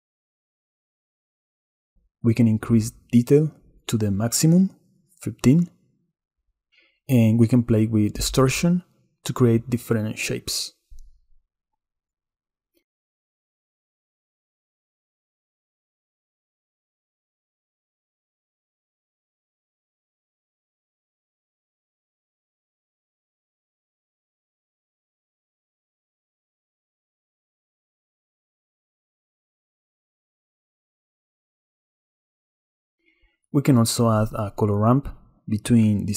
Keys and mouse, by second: 1.6 click, 3.2 click, 6.4 click, 8.4 shift+click, 10.7 shift+click, 11.7 shift+click, 23.1 shift+click, 23.8-25.4 shift+drag, 27.8-29.0 drag, 35.0 shift+a.